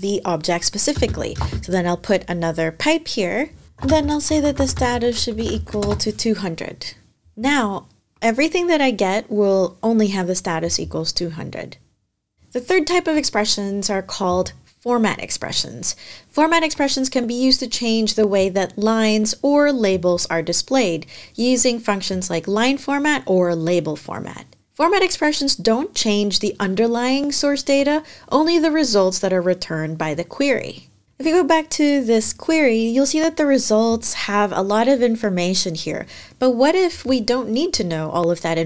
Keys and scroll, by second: 0.7-1.1 typing, 3.4-5.3 typing.